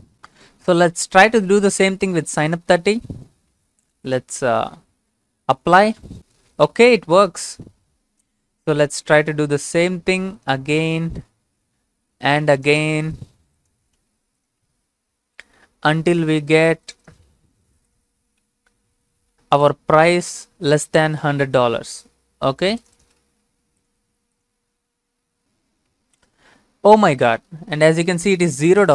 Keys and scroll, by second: 3.3 ctrl+c, 4.6 ctrl+v, 9.2 ctrl+c, 10.0 ctrl+v, 13.0 ctrl+c, 14.0 ctrl+v, 17.3 ctrl+c, 18.4 ctrl+v, 23.2 ctrl+c, 24.0 ctrl+v.